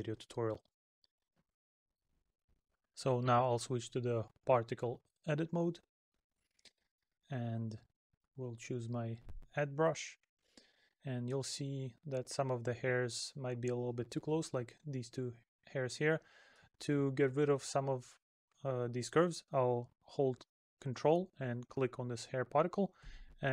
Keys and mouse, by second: 7.2 middle click, 9.8 middle click, 14.1 middle click.